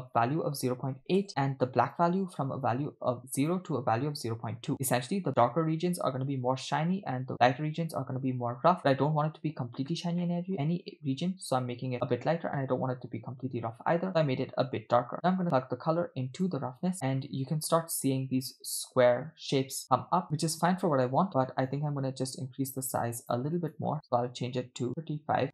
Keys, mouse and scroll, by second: 1.9 click, 2.5 click, 10.2 middle click, 15.3 click, 15.8 click, 17.1-18.0 scroll up 3, 18.3-18.7 scroll up 2, 20.7 middle click, 21.2-21.7 scroll up 2, 21.7-23.5 drag, 23.6-25.4 drag.